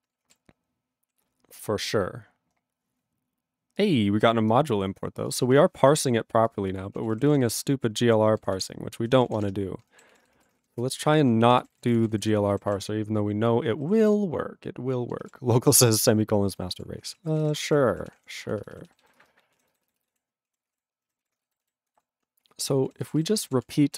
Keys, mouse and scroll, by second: 5.9 ctrl+g, 6.0 click, 6.5 click, 6.5 click, 7.0 ctrl+a, 7.1 ctrl+k, 7.5 ctrl+e, 8.0 ctrl+/, 8.5 ctrl+n, 8.5 ctrl+e, 9.2 ctrl+p, 9.3 ctrl+e, 9.5 BackSpace, 10.1 ctrl+s, 11.3 ctrl+s, 11.5 ctrl+n, 11.7 ctrl+e, 11.9 ctrl+n, 12.0 ctrl+e, 12.1 ctrl+n, 12.2 ctrl+e, 12.7 ctrl+s, 14.0 ctrl+s, 16.9 ctrl+s, 17.2 ctrl+a, 17.3 ctrl+space, 17.4 ctrl+e, 17.5 ctrl+n, 17.6 ctrl+e, 17.6 ctrl+g, 18.1 ctrl+s, 18.2 ctrl+p, 18.4 ctrl+b, 19.2 ctrl+space, 19.5 ctrl+e, 19.7 ctrl+b, 20.1 ctrl+w, 20.5 ctrl+a, 20.6 ctrl+space, 20.6 ctrl+e, 20.7 ctrl+g, 21.3 ctrl+s, 21.6 alt+b, 22.4 ctrl+BackSpace, 22.8 ctrl+e, 23.0 ctrl+b, 23.4 ctrl+d, 23.6 ctrl+e, 23.9 ctrl+a.